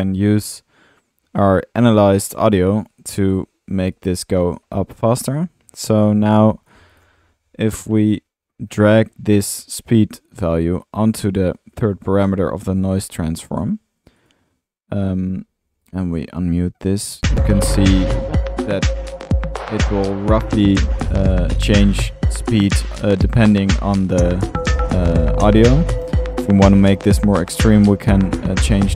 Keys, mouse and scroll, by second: 0.6 Delete, 1.8 click, 6.1 middle click, 6.1-6.9 drag, 6.1 typing, 6.5 middle drag, 6.5 scroll up 1, 7.1 click, 8.0-8.5 drag, 9.7 click, 9.8 click, 13.5 click, 15.1 middle click, 15.8 click, 17.1-17.4 drag, 25.5 drag, 25.7 middle click, 26.5-26.9 drag, 27.9 click.